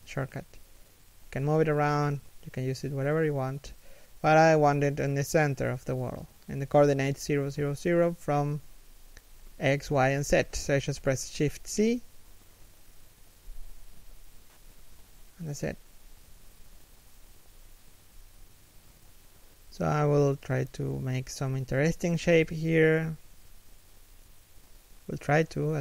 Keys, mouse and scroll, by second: 0.7 r, 4.8 middle click, 5.4 1, 6.1 shift+middle click, 7.7 shift+c, 12.0 middle click, 12.7 z, 13.7 scroll down 1, 16.8 1, 17.1 z, 17.3-17.9 scroll up 1, 17.9 shift+middle click, 18.4 scroll down 1, 18.7 r, 21.3 a, 21.8 r, 24.5 a, 24.9 alt+right click, 25.2 r.